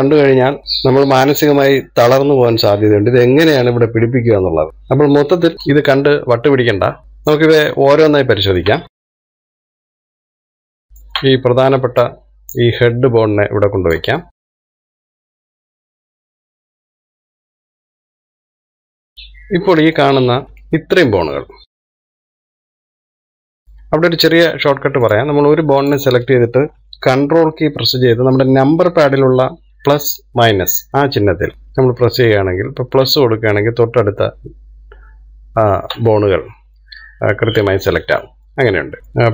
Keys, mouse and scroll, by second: 7.0-9.5 middle drag, 9.5 KP_3, 10.6 click, 12.0-13.0 shift+middle drag, 13.0 click, 13.9 click, 14.7 shift+middle click, 15.2 click, 16.2 click, 16.9 shift+middle click, 17.3 click, 18.4 middle click, 18.8 scroll down 1, 18.9 middle click, 19.4-19.8 scroll up 1, 19.8-21.0 middle drag, 21.0 click, 22.1 middle click, 22.9 shift+click, 23.3 shift+click, 23.5-25.8 middle drag, 25.8-26.4 scroll up 1, 26.4 click, 27.1 click.